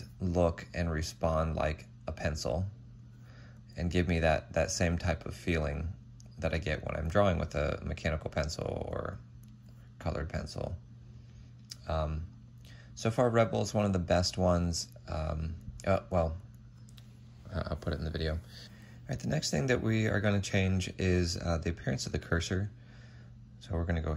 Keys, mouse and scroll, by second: 4.1 ctrl+z, 18.5 double click.